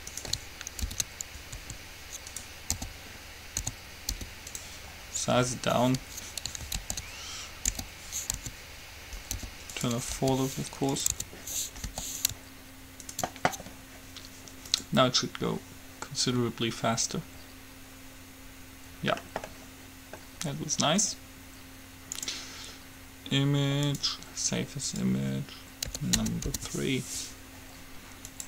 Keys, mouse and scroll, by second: 0.3-2.1 right drag, 1.1 ctrl+l, 1.7 s, 2.1 middle click, 2.7-4.4 right drag, 2.9 o, 4.1 s, 7.1 ctrl+z, 7.9 o, 8.6 s, 10.3 g, 11.3 Tab, 11.8-13.2 middle drag, 12.1 g, 13.2-15.0 right drag, 15.1-16.6 drag, 17.6-21.4 middle drag, 22.3-24.1 drag, 26.9 Return.